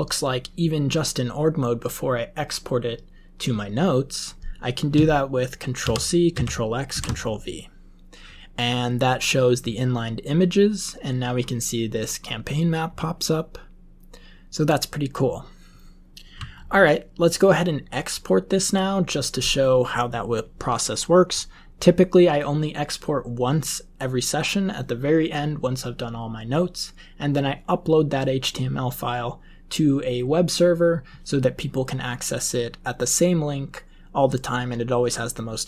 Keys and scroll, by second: 5.7 ctrl+c, 6.3 ctrl+x, 6.8 ctrl+v.